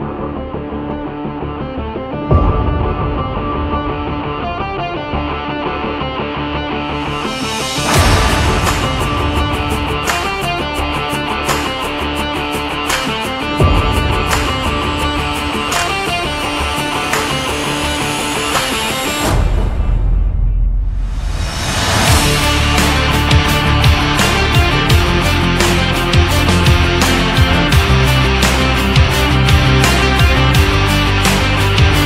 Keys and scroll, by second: 10.1 Up, 25.4 Right.